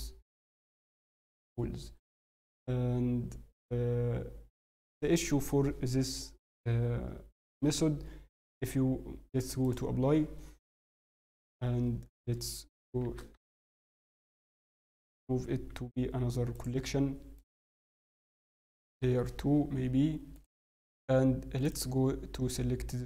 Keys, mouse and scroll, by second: 1.7 scroll, 4.5 scroll, 4.6 scroll, 9.6 click, 11.1 ctrl+z, 11.8 scroll, 11.8-12.4 scroll down 8, 15.7 m, 21.6 click, 21.6 scroll up 4.